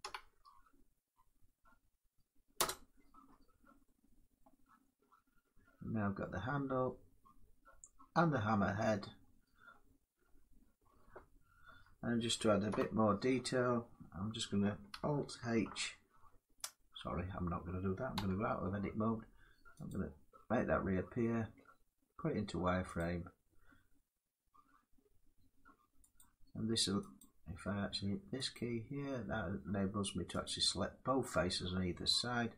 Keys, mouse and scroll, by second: 2.3 Return, 4.1 middle click, 4.7 Tab, 4.9 scroll up 3, 5.9 middle click, 6.1 1, 6.1 Tab, 7.0 scroll down 3, 8.6 middle click, 8.8-9.4 scroll down 5, 9.3 scroll up 1, 9.4 scroll down 1, 9.9 middle click, 10.1 Tab, 10.4-10.8 scroll up 4, 11.6 middle click, 11.6 scroll up 1, 12.4 7, 14.9 middle click, 15.2 alt+h, 17.8 Tab, 19.6 click, 20.4 middle click, 22.6 click, 25.8 click, 27.0 click, 28.2 click, 30.1 click, 32.3 scroll down 3.